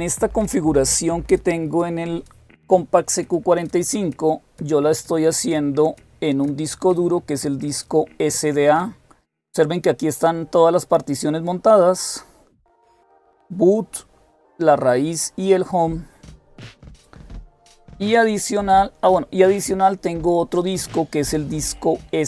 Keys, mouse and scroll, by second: 5.3-9.2 drag, 19.7-22.2 drag.